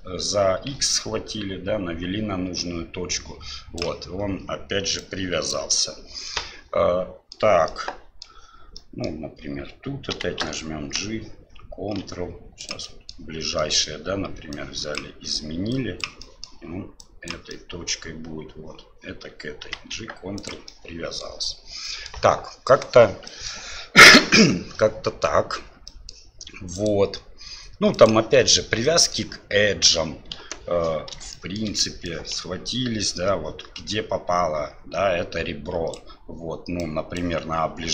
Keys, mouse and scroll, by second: 5.0 click, 6.3-7.4 middle drag, 7.8-8.2 middle drag, 8.8 middle click, 10.1 g, 13.0 middle click, 13.7 middle click, 14.6 click, 15.8 click, 16.2 middle drag, 17.1 click, 17.5 click, 19.6 g, 20.8-21.2 drag, 21.9 click, 23.4 click, 26.0 middle click, 26.8-28.7 drag, 28.8 middle drag, 30.3 KP_7, 31.4 shift+middle click, 32.2-36.0 ctrl+drag, 36.9 click.